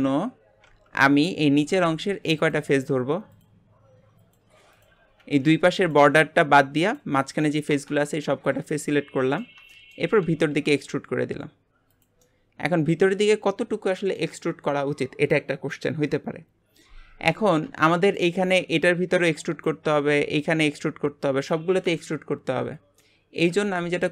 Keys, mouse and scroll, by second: 0.7 Tab, 1.0 middle click, 1.6 click, 2.4 shift+click, 3.3 shift+click, 4.2 shift+click, 4.7 shift+click, 8.3-10.3 middle drag, 10.3 e, 12.2-15.3 middle drag, 17.9-22.1 shift+middle drag, 23.0 middle click, 23.7 alt+z.